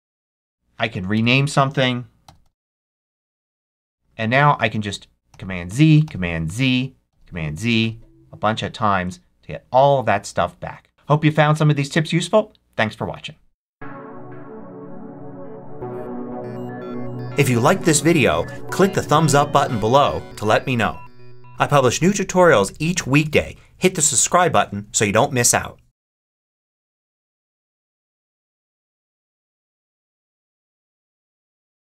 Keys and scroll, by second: 1.0 Return, 2.1 x, 2.9 Return, 5.2 super+z.